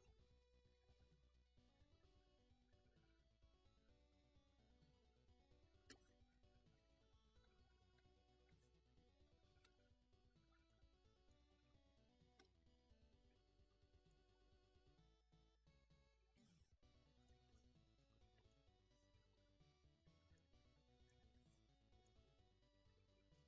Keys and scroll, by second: 1.2-5.8 ctrl+h.